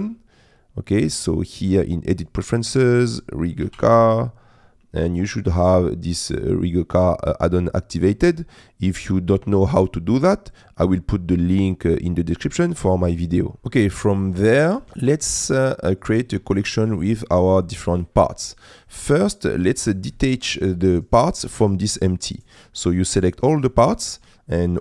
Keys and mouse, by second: 1.1-2.3 drag, 13.8 middle click, 15.8 middle click, 16.6 middle click, 17.2 shift+middle click, 17.9 middle click.